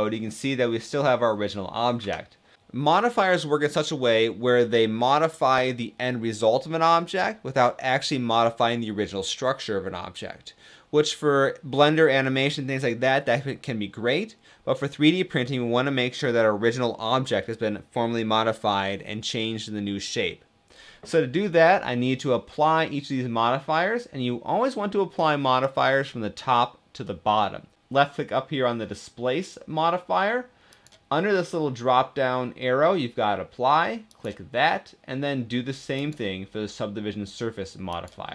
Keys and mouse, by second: 2.2 Tab, 30.4-38.3 drag.